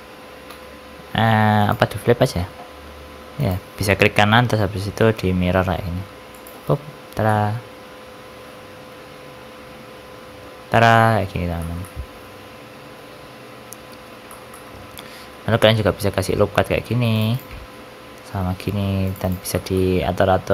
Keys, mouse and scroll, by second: 0.4 r, 3.3 right click, 7.2 middle click, 9.3 middle click, 11.2-11.5 scroll down 2, 11.5 shift+middle click, 11.7 shift+middle click, 14.2 shift+middle click, 14.4 middle click, 15.0 ctrl+r, 19.4 shift+middle click, 19.6 middle click, 20.3-20.5 scroll up 5.